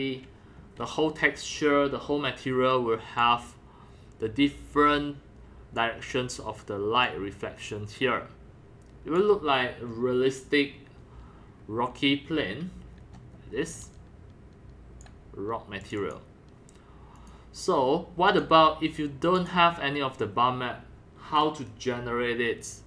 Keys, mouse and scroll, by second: 0.4 scroll down 1, 0.7 scroll up 1, 3.2-4.3 drag, 5.7 click, 7.1-9.2 drag, 9.2-11.3 drag, 11.3 scroll up 1, 11.6 scroll down 1, 13.0 scroll down 1, 13.3 scroll up 1, 13.7-15.0 c, 13.8-15.0 drag, 15.8 click, 16.0 click, 17.2 click, 18.3 click, 19.2-22.8 drag.